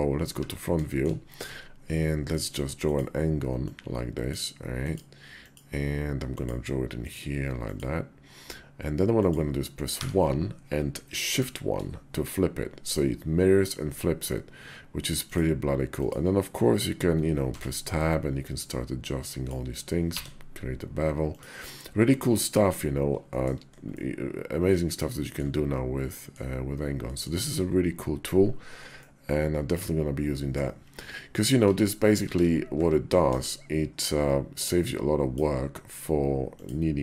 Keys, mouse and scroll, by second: 0.7 shift+click, 1.1 d, 3.4-4.1 drag, 23.1 shift+drag, 23.7-25.2 middle drag, 25.9 middle drag, 26.8 middle drag, 27.2 KP_5, 28.7-30.4 drag, 31.5 ctrl+z, 32.1 ctrl+z, 32.5 `, 33.0 KP_5, 34.6-35.2 drag.